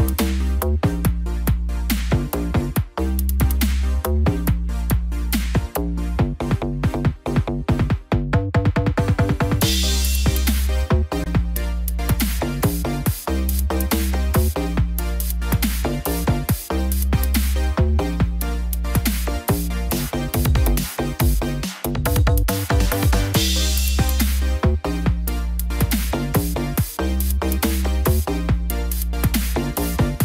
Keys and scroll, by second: 3.3 ctrl+=, 13.5 ctrl+-, 14.3 ctrl+0.